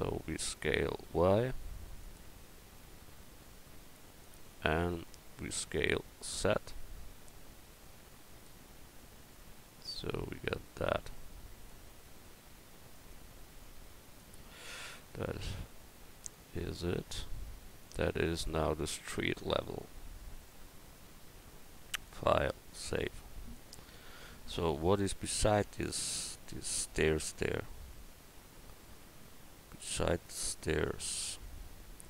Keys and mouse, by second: 1.0 s, 2.8-4.5 drag, 4.5 right click, 5.8 s, 12.1 Tab, 12.5 Tab, 13.5 Tab, 19.2 a, 19.9 a, 24.0 KP_1.